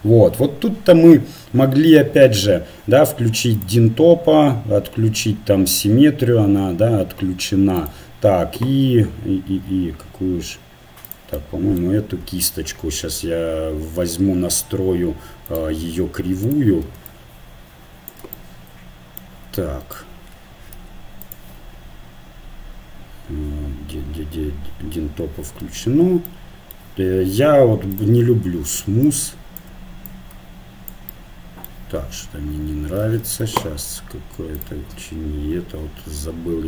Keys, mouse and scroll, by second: 3.6-5.3 drag, 5.3-7.8 middle drag, 7.8-9.7 drag, 11.4-15.5 middle drag, 15.5-18.8 drag, 18.8 middle click, 20.7 f, 21.7-23.3 drag, 27.9-31.8 drag, 33.3 ctrl+z.